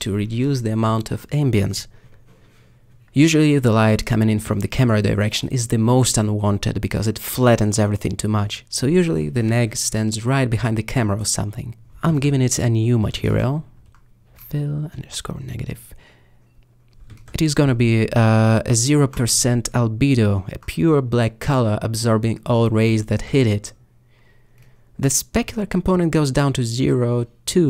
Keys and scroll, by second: 0.0 x, 0.9 g, 3.0 s, 5.0 alt+g, 7.6 alt+s, 13.8-15.0 typing, 15.0 Return.